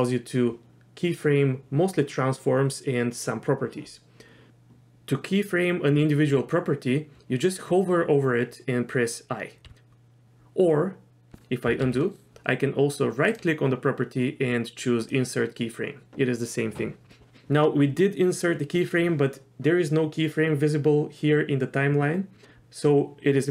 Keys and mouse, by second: 9.6 i, 11.9 ctrl+z, 13.3-15.1 right drag.